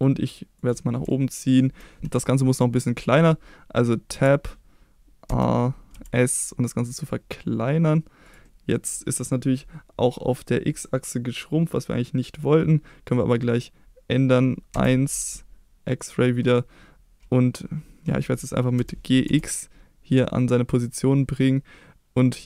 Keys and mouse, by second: 0.5 click, 4.1 Tab, 5.2 a, 5.9 s, 8.2 click, 8.4 middle click, 14.7 KP_1, 15.9 click, 18.7 g, 19.3 x, 20.7 click.